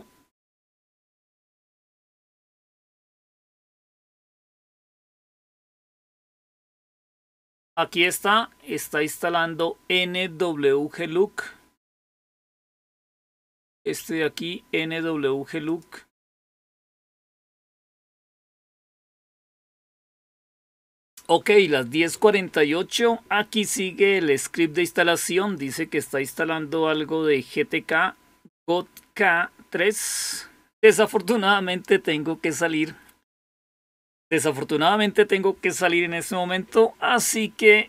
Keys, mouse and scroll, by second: 12.4-13.7 drag, 15.5 click, 19.3 Return.